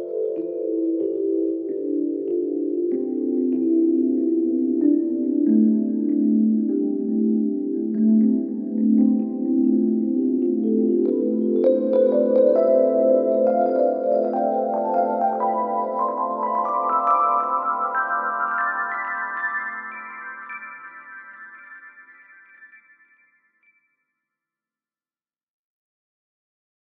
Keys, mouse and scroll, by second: 13.4 z, 14.5-17.9 drag.